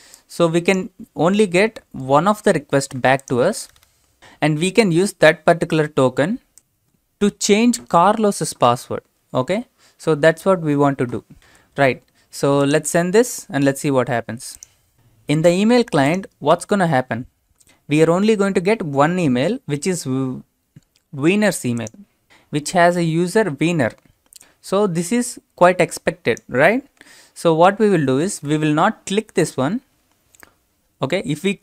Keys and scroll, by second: 11.5 alt+Tab, 14.9 alt+Tab, 28.3 ctrl+c.